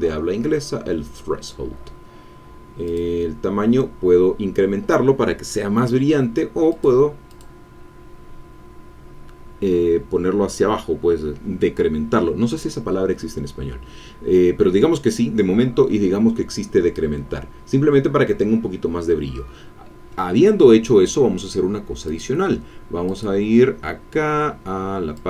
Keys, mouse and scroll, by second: 2.9 click, 6.6 click, 7.3 click, 13.2-13.6 scroll down 1, 14.0-14.6 scroll up 1, 14.9-15.3 scroll down 1, 22.0 click, 23.1 click, 23.6-24.2 scroll down 2, 25.1 click.